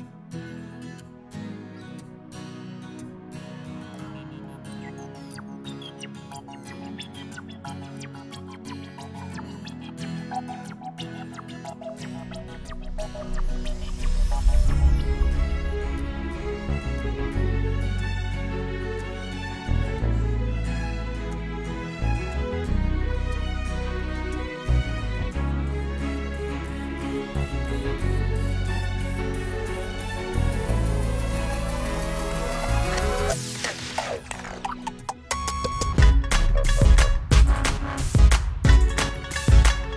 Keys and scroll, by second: 36.2 s, 38.9 0, 39.4 Return.